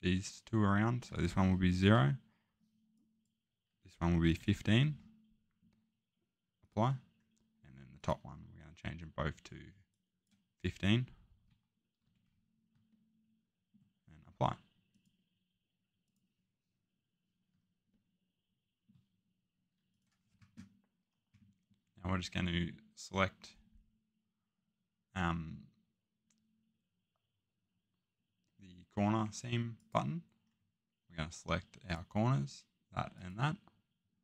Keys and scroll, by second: 1.9 0, 4.2-4.6 typing, 11.4-12.0 typing.